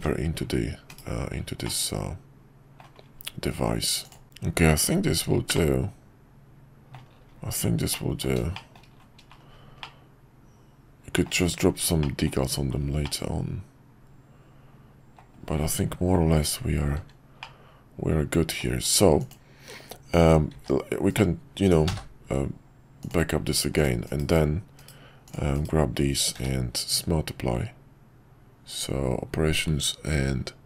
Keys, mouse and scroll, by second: 0.9 /, 1.6-2.8 middle drag, 4.2-4.9 middle drag, 5.5-6.9 middle drag, 7.9 middle click, 8.5 shift+middle drag, 9.8-11.2 middle drag, 12.0-12.3 shift+middle drag, 13.0-15.2 middle drag, 17.4-18.6 middle drag, 20.5 shift+d, 21.8 m, 24.0 /, 24.8 /, 26.3 q.